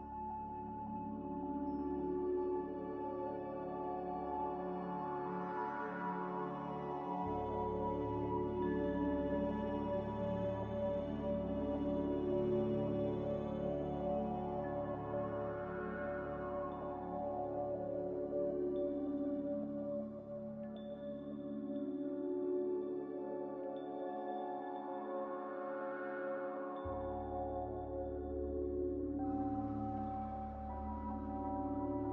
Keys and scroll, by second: 7.2 z, 8.8-9.7 typing, 11.4-12.1 typing, 14.5-15.4 typing, 24.9-25.7 typing.